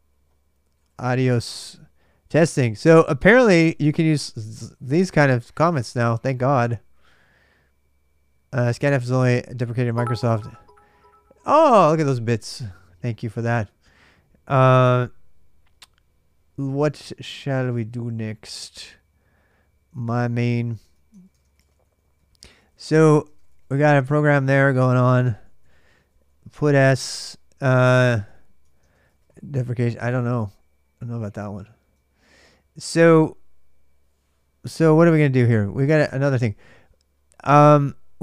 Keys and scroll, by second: 0.0-2.5 typing, 2.2 ctrl+[, 3.7 Return, 3.7-5.5 typing, 21.7-26.7 typing, 28.1 ctrl+[, 28.4-30.2 typing, 31.9 ctrl+a, 32.0 ctrl+a, 34.0-34.7 typing, 35.9 ctrl+a, 35.9 super+Tab.